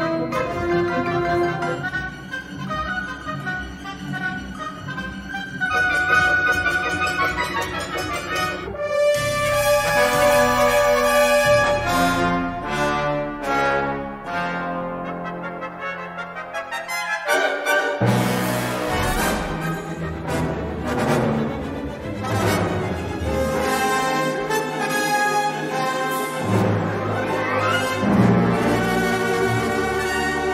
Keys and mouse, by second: 3.4 middle click, 3.9 shift+middle click, 4.3-5.5 middle drag, 5.7 shift+middle click, 6.5 middle click, 7.1 middle click, 7.6 middle click, 10.8 shift+s, 15.3 shift+a, 16.7 s, 20.3 u, 21.7 a, 21.9 s, 22.6 g, 24.6 middle click, 26.0 3, 26.5 middle click, 27.8 click, 28.5 middle click, 29.2 e.